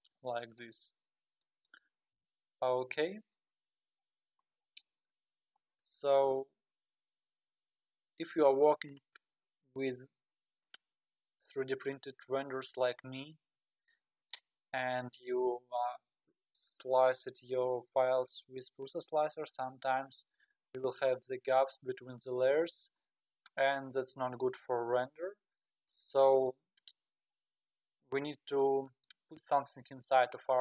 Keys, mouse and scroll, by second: 2.1 KP_1, 4.1-5.9 scroll down 20, 6.3-6.6 scroll up 9, 7.1-7.4 scroll down 4, 8.0-8.4 scroll up 6, 11.4-14.5 middle drag, 20.5-21.1 scroll down 2, 25.7-26.4 scroll up 1, 26.4-26.7 scroll up 1, 26.7-30.6 middle drag.